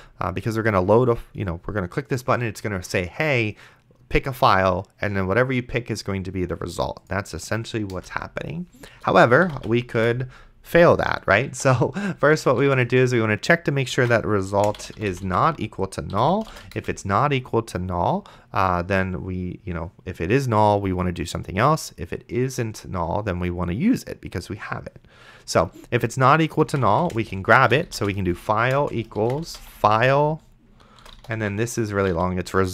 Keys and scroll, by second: 8.2 Return, 9.2-16.3 typing, 16.1 End, 16.8 Return, 26.5-32.7 typing.